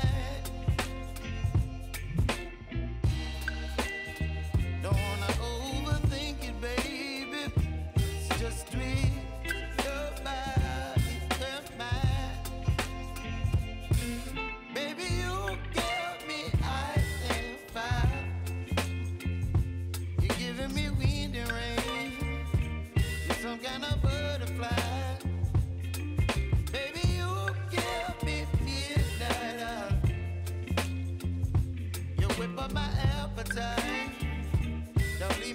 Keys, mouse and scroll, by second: 1.7 Return, 2.9 click, 3.5 space, 5.4 click, 5.9 ctrl+c, 6.6 click, 7.0 ctrl+v, 8.1-10.9 drag, 10.9-11.3 typing, 12.0-15.5 drag, 15.9-16.5 typing, 17.1 click, 17.8 scroll down 1, 19.0 click, 19.5 space, 22.2 space, 24.7 click, 25.9 ctrl+a, 26.7 click, 27.7 scroll up 1, 28.4 click, 29.2 space, 32.8 space, 33.4 click, 34.3 s, 35.0-35.5 drag.